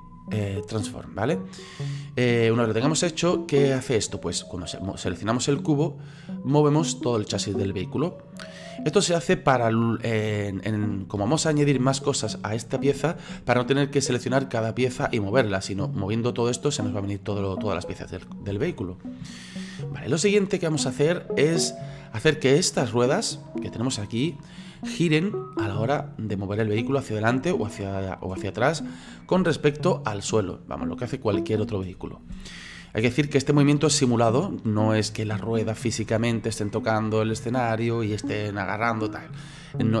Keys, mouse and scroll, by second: 3.5 right click, 4.9 right click, 5.8-8.8 drag, 11.2 ctrl+z, 16.4-18.5 drag, 18.5 ctrl+z, 19.5-40.0 shift+middle drag.